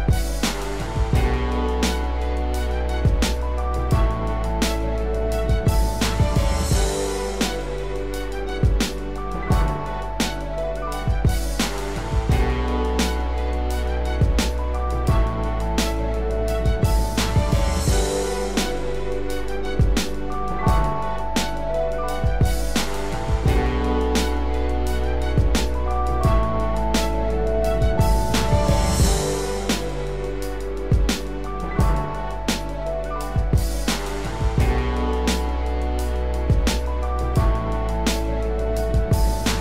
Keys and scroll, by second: 3.0 ctrl+z, 17.9 ctrl+z, 38.6 ctrl+z.